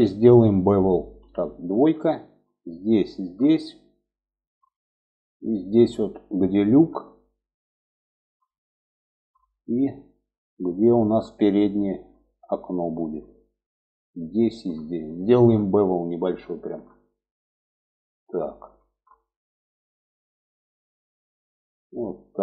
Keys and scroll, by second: 0.5 2.